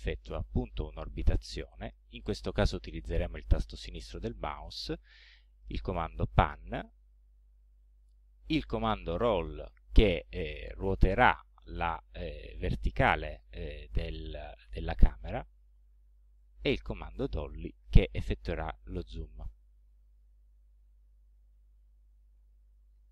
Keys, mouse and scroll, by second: 0.7-2.7 drag, 5.4 click, 6.3-7.6 drag, 8.3 click, 9.3-15.4 drag, 16.3 click, 17.0-20.4 drag, 21.2 scroll down 1, 21.8-22.8 scroll up 2.